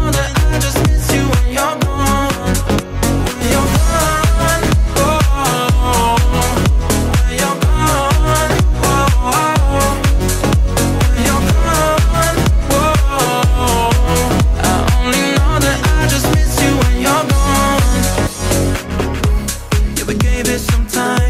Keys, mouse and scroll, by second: 0.0-2.7 middle drag, 2.7 click, 3.0-3.4 scroll up 1, 3.7 z, 4.6 scroll down 2, 5.3 shift+a, 7.3-8.4 drag, 8.5-9.9 drag, 9.9 s, 10.8 z, 11.6 click, 12.7 g, 14.1 click, 15.0 s, 16.3 click, 17.1 s, 17.8 g, 18.8-20.2 middle drag, 20.2-20.6 scroll down 1, 20.6 shift+middle click.